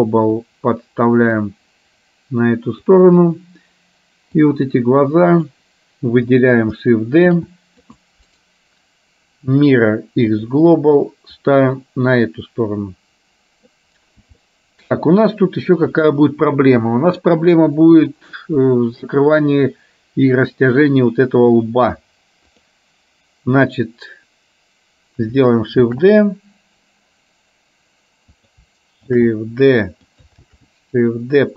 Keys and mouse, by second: 0.6-2.9 drag, 4.6-5.7 drag, 7.3 shift+d, 8.6-10.7 right drag, 11.4-13.9 drag, 14.4 shift+middle click, 22.6 click, 25.9 shift+d, 29.2 shift+d, 30.6 shift+d.